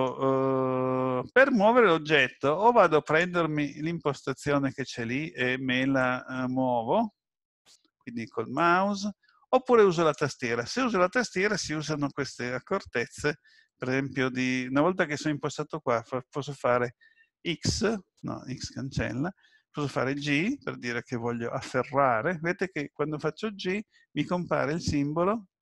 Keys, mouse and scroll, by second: 3.0 click, 6.0 click, 8.6 click.